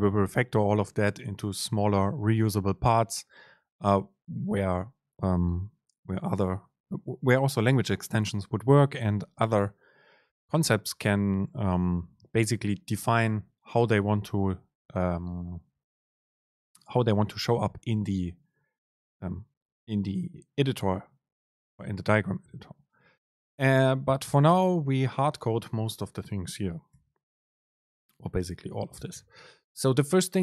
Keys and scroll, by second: 2.9 Down, 3.7 End, 4.4 Left, 11.1 End, 11.5 Left, 24.6 Return, 25.5 Return, 25.5 super+space.